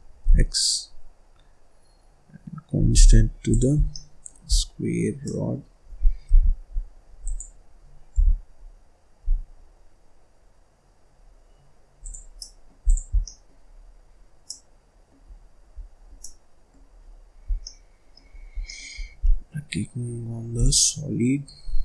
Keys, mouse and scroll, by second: 3.4 click, 3.7 scroll down 1, 3.9 middle click, 4.4-4.9 scroll down 3, 4.9-5.2 scroll up 2, 5.2 middle click, 5.9-6.2 scroll down 1, 6.2 g, 6.7-7.2 scroll up 1, 7.2 click, 8.1 g, 12.3 middle click, 12.8 click, 13.1 scroll down 1, 13.2 middle click, 13.6-14.4 scroll up 4, 14.4 middle click, 15.2-16.2 scroll down 3, 16.2 middle click, 16.9-17.5 scroll up 3, 17.5 scroll down 2, 17.6 middle click, 18.3 scroll up 1, 18.5 scroll down 3, 18.6 middle click, 19.2 z, 21.4 scroll down 1, 21.6-21.8 scroll up 3.